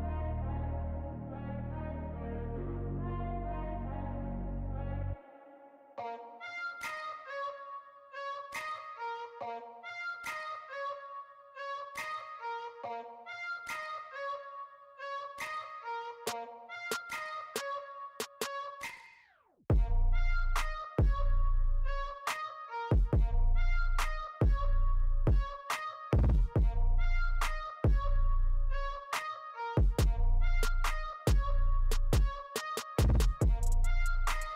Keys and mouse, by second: 1.5 right click, 1.8 right click, 1.9 right click, 7.4 right click, 7.6 right click, 8.4 right click, 13.5 right click, 15.4 right click, 27.0 right click, 27.5 right click, 28.1 right click, 29.8 right click, 30.5 right click, 30.9 right click, 31.7 right click, 32.6 right click, 33.3 right click.